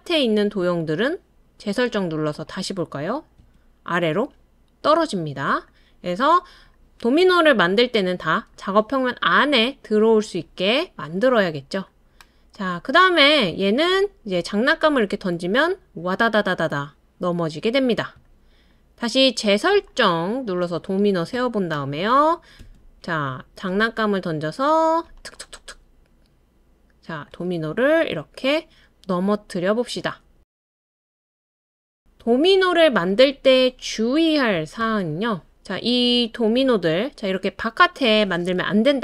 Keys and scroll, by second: 0.6 space, 3.4 space.